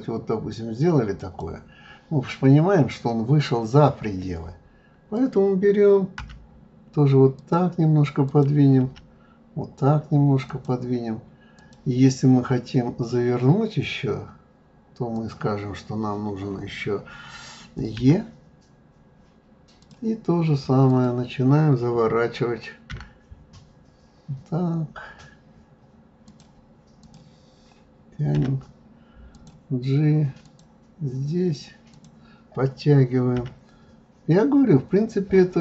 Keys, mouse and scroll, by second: 5.1 click, 6.2 g, 8.2 click, 8.8 g, 11.5 click, 13.0 click, 15.1 click, 18.0 e, 20.9 click, 22.9 g, 27.0 click, 28.3 g, 30.4 click, 31.9 click, 33.3 g.